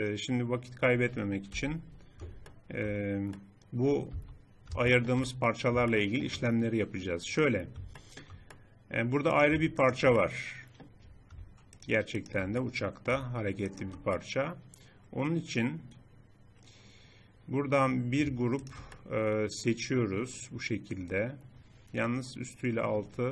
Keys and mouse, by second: 1.5 KP_1, 4.1 Tab, 7.3 click, 8.0 click, 8.3 click, 8.7 click, 9.3-11.8 middle drag, 14.7 middle click, 18.1-19.5 drag, 19.5 middle click, 19.8 click, 19.9 middle click, 21.5 middle click.